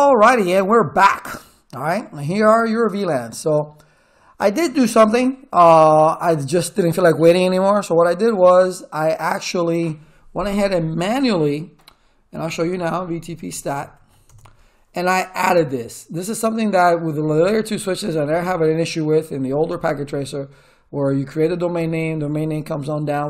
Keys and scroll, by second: 12.0-14.4 typing.